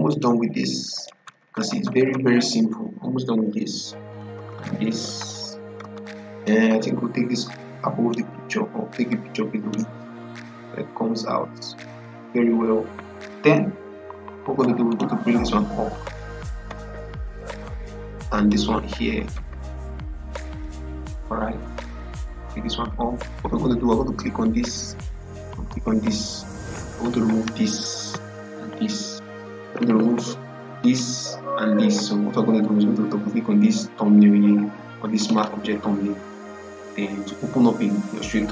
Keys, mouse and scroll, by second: 0.0 click, 0.8 Left, 3.1 Right, 4.0 click, 6.3-11.8 drag, 14.8 click, 15.8 Up, 16.6 Left, 18.2 click, 19.1 Left, 20.4 click, 20.8 Right, 21.8 click, 22.2 Up, 23.9 scroll up 1, 30.7 click, 35.1 click.